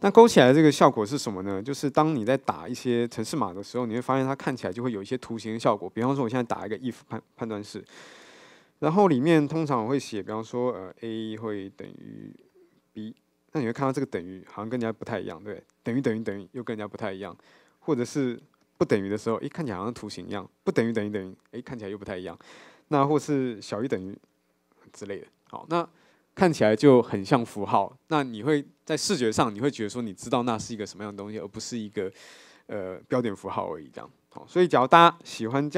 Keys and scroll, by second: 7.2 Tab.